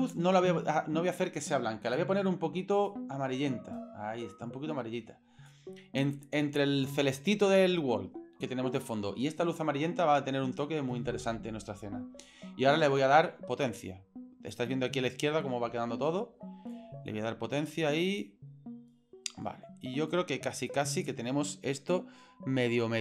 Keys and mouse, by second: 1.8 click, 13.1-14.5 drag, 16.7-18.2 drag, 20.2 click.